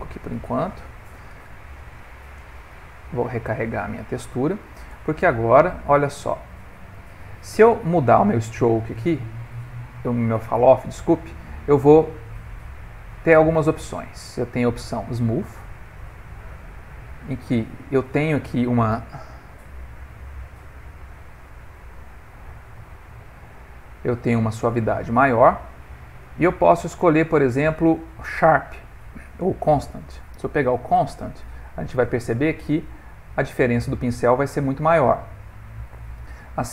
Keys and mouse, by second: 2.8 click, 5.3 f, 8.8 middle click, 11.2 click, 15.7 click, 16.1 click, 20.4 middle click, 21.5 right click, 22.6 click, 23.6 right click, 26.0 click, 30.6 right click, 31.8 click, 32.8 right click, 34.9 right click, 35.3 right click.